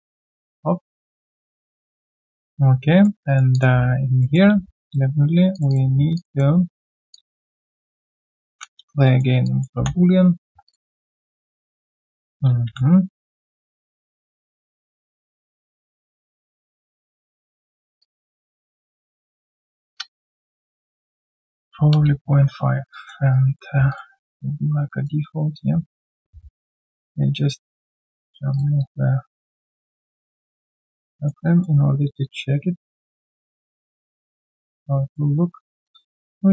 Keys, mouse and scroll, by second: 1.9 alt+middle click, 2.2 alt+click, 2.7 right click, 3.8 1, 4.2 alt+middle click, 4.5 q, 4.6 right click, 5.7 double click, 6.1 shift+click, 6.3 shift+double click, 7.1 alt+click, 8.5 ctrl+b, 9.0 alt+middle click, 9.4 alt+click, 9.7 3, 10.1 right click, 10.7 q, 10.9 alt+click, 18.0 alt+click, 18.5 alt+middle click, 19.0 alt+click, 19.9 alt+click, 21.5-22.2 typing, 22.9 alt+click, 23.3 right click, 28.1 alt+click, 29.8 alt+middle click, 30.1 alt+click, 31.1 alt+middle click, 31.4 alt+click, 32.6 alt+middle click, 32.9 alt+click, 34.7 alt+click, 35.4 alt+scroll down 1, 36.0 alt+scroll down 1, 36.1 double click, 36.3 ctrl+a.